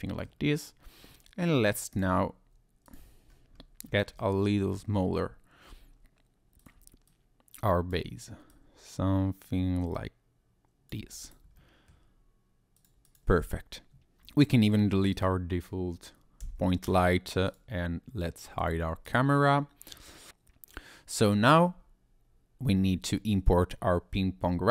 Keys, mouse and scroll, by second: 1.1 middle click, 1.9 click, 2.8 click, 3.3-3.8 scroll up 2, 3.8-4.1 scroll down 2, 4.2 shift+middle click, 4.7 Tab, 6.6 click, 7.1 click, 8.5 click, 11.0 Tab, 11.2 click, 11.5 scroll down 1, 11.6 middle click, 12.8 click, 13.0 click, 13.3 scroll down 1, 14.4 click, 15.1 click, 16.4 x, 17.5 click, 18.6 click, 19.0 click, 20.3 click.